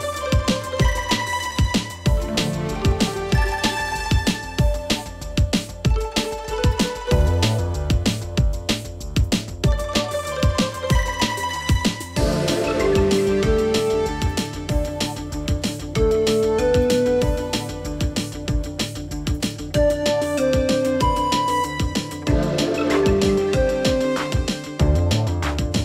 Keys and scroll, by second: 1.4 ctrl+c, 3.2 ctrl+v.